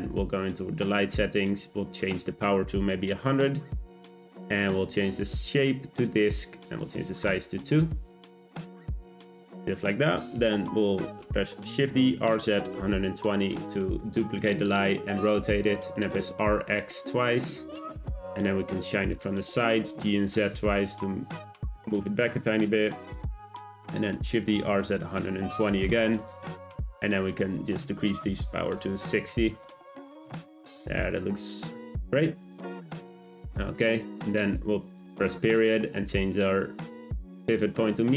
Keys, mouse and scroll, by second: 0.8 click, 2.0 click, 3.0 0, 5.1-9.1 drag, 11.7 shift+d, 15.7 r, 19.4 g, 24.1 shift+d, 27.7-30.4 drag, 30.8 scroll down 1, 32.3 middle click, 33.1-33.7 scroll down 1, 33.7 shift+scroll down 1, 34.0 shift+middle click, 34.3-35.0 shift+scroll up 1, 35.0 ..